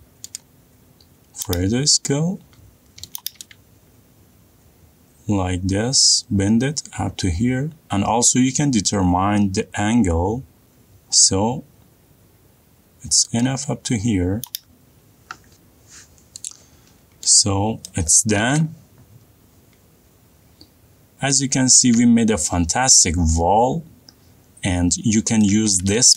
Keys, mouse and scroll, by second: 0.2 middle click, 1.5 click, 3.3 click, 4.4 shift+middle click, 4.5 middle click, 4.6 middle click, 14.6 click, 19.2 middle click, 19.4 middle click, 19.7 middle click, 19.7 shift+middle click, 19.9 shift+middle click, 21.2 middle click, 21.6 middle click, 21.7 middle click, 22.6 middle click, 22.8 middle click, 23.4 middle click.